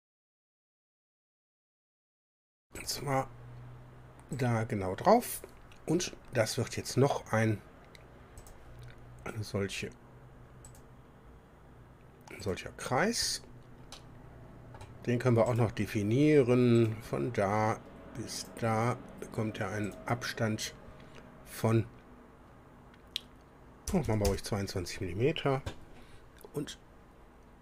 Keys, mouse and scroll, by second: 2.8 click, 4.4 click, 8.4 click, 10.7 click, 12.4 click, 13.5 scroll up 1, 13.9-15.0 drag, 15.5 click, 16.8 click, 18.4 click, 19.9 click, 23.9 KP_2, 24.1 KP_2, 24.3 KP_Enter, 25.9-26.2 scroll up 1.